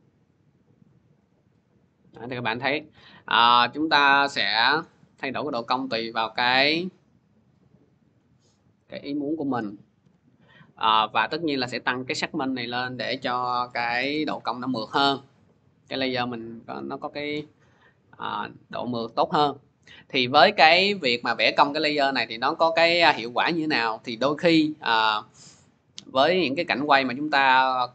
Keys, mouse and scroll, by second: 1.7-3.2 scroll, 4.6 click, 7.9 click, 9.1-10.3 typing, 10.4 click, 12.2 click, 13.0-13.8 typing, 13.8-18.9 Return, 17.5 scroll, 18.9 scroll, 20.6 click, 21.8-22.5 scroll, 23.9 scroll, 24.2 click, 25.1 click, 25.6-26.1 scroll.